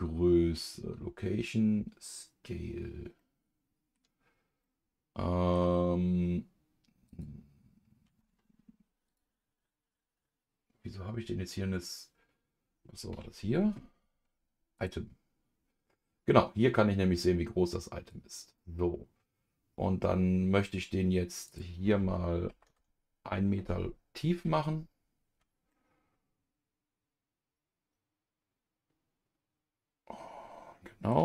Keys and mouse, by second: 3.2 middle click, 4.6-7.1 middle drag, 7.1-9.1 drag, 13.1 n, 18.1 click, 21.5-23.8 drag, 25.7-31.1 middle drag.